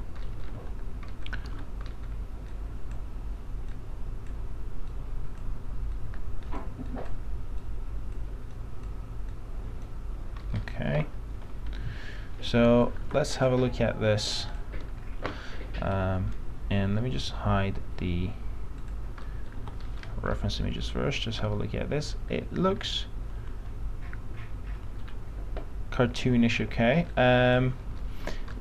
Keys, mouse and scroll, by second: 0.4-0.8 scroll up 1, 0.8 f, 1.3 middle click, 1.6 alt+x, 2.0 middle click, 2.7-7.1 drag, 10.6-11.8 scroll down 1, 11.8 F3, 12.6 F3, 13.2 alt+x, 13.6 click, 19.4 middle click, 20.0-20.4 scroll down 1, 25.7 alt+middle click, 27.3 click, 28.2 alt+middle click.